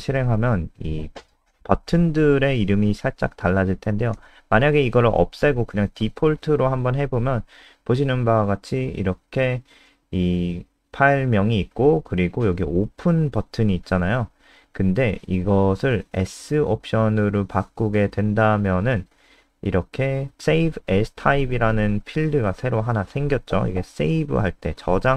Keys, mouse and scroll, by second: 0.0-3.5 typing, 0.0 Delete, 2.8 Left, 3.0 Left, 3.1 Left, 3.7 ctrl+s, 3.9 F5, 5.9 click, 16.3 BackSpace, 16.4 BackSpace, 17.1 ctrl+s, 17.3 F5.